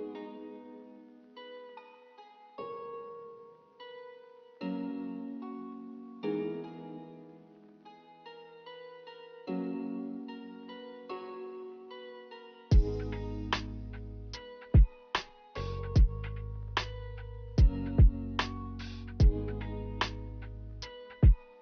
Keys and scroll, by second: 0.7 z, 4.5 g, 6.0 z, 8.8-9.7 typing.